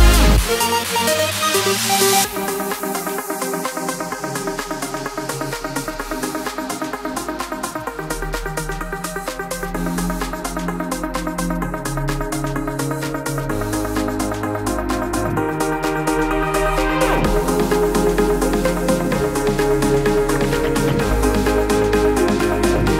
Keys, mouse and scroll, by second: 5.2 click, 7.6-9.0 shift+drag, 15.7-20.3 drag, 20.5-22.9 drag.